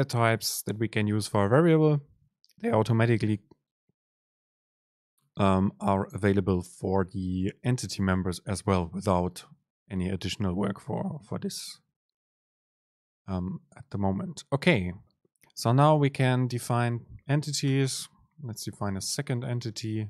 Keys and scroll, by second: 17.1 Down, 17.7 Return.